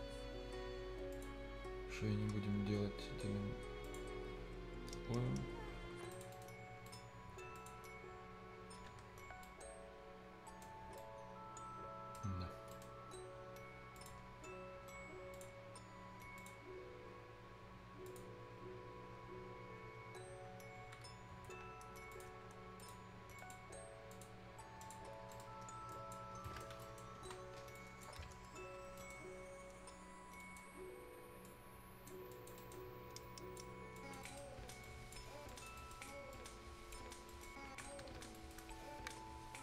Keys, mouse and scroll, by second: 0.0 scroll down 1, 0.2-0.6 scroll up 1, 1.1 click, 1.4 scroll down 1, 1.7-3.1 scroll up 1, 3.8 click, 4.2-4.5 scroll down 1, 4.5-4.9 scroll up 1, 6.1 click, 6.3 right click, 6.6-7.6 scroll up 2, 6.9 right click, 7.6 click, 7.8-8.2 scroll down 1, 8.4 scroll up 1, 8.9 scroll down 1, 8.9 Escape, 9.2 scroll up 1, 9.4 right click, 10.7 scroll down 1, 11.3 right click, 12.3 scroll up 1, 12.7 right click, 13.1 scroll up 1, 14.0 click, 14.2 scroll down 1, 14.4-15.3 scroll, 15.3 click, 15.6-15.9 scroll down 1, 15.9-16.4 scroll up 1, 16.4 click, 16.6 scroll down 1, 18.1 click, 18.3 scroll up 1, 21.1 ctrl+Num_Lock, 21.1-21.5 scroll up 1, 22.1 click, 22.2 click, 25.1 scroll down 1, 25.3 right click, 25.6 scroll up 1, 25.9 click, 26.3 scroll up 1, 26.4 right click, 26.7 scroll down 1, 26.8 right click, 27.2 F10, 27.8 click, 28.2-28.5 scroll up 1, 28.8 scroll down 1, 29.0 right click, 30.4 click, 30.8 scroll up 1, 31.5 click, 33.2 click, 34.2 right click, 34.8 click, 35.8 right click, 36.3 click, 37.1 scroll down 1, 37.3 right click, 37.5 scroll up 1, 37.8 scroll down 1, 37.9 Escape, 38.4 right click.